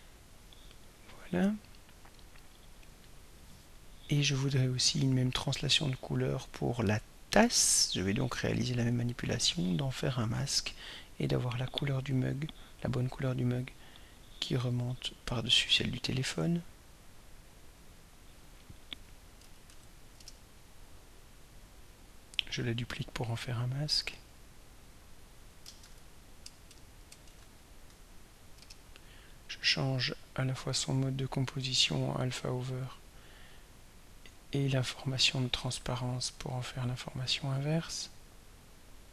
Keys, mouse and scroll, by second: 8.6 click, 17.2 click, 18.1 click, 19.1-20.3 typing, 21.4 click, 22.1 click, 23.0 click, 23.8 click, 25.1 click, 25.6-28.1 typing, 28.6 Return, 30.6 click, 31.3 click, 32.0 click, 33.2-33.8 scroll down 1, 33.9-34.3 scroll down 1, 35.1 click, 36.6 click, 37.3 click.